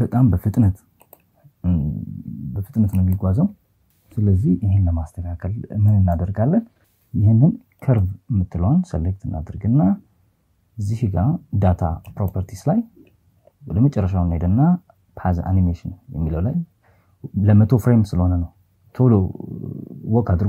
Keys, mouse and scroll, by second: 0.0 click, 1.1 click, 2.5 click, 3.5 click, 6.6 right click, 10.8 click.